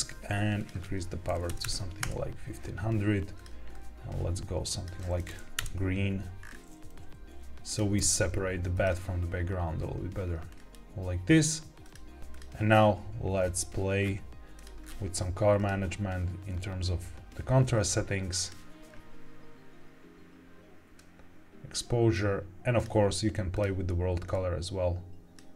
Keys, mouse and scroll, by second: 0.5-1.9 drag, 1.5 KP_0, 3.3 click, 5.5 KP_0, 6.4-6.9 scroll up 3, 6.8 g, 6.9 z, 7.6 click, 7.9 g, 8.7 click, 10.4-11.4 scroll down 3, 11.7 click, 12.2 click, 12.6-13.1 scroll down 2, 13.3-13.9 scroll down 1, 13.9-14.5 scroll down 1, 14.5 click, 14.8-15.2 scroll down 1, 15.5-18.5 drag, 20.9-22.1 drag, 22.7 click, 23.4 click.